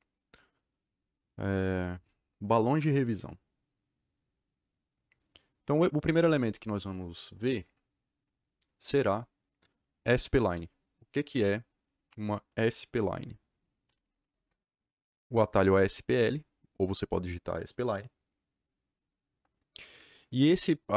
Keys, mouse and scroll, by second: 13.6-14.5 typing.